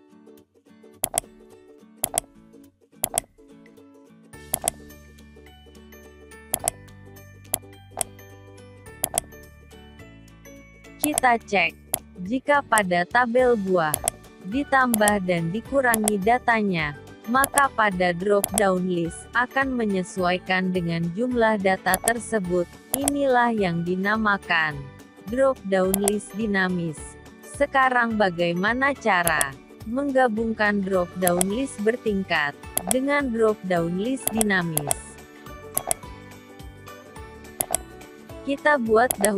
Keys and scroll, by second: 2.5 ctrl+v.